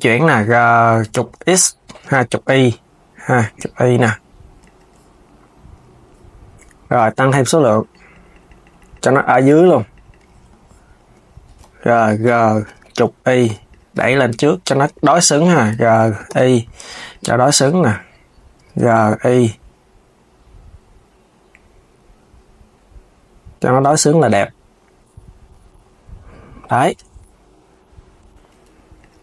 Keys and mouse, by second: 7.0-11.3 drag, 11.3 KP_3, 12.4 g, 17.0 KP_1, 18.4 g, 25.4 KP_3, 26.6 Tab, 27.9 Tab, 28.7 click.